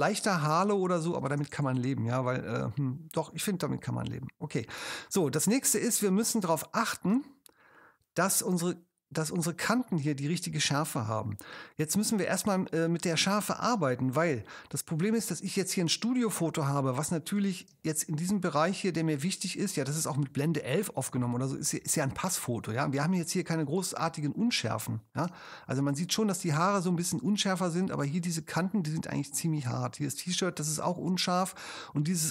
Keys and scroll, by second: 1.5 super+0, 17.7 super+space, 25.3 space.